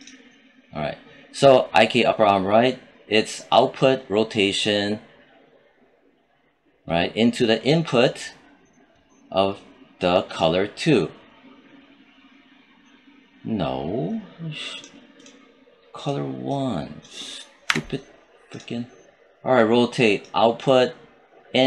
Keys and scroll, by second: 17.5 1.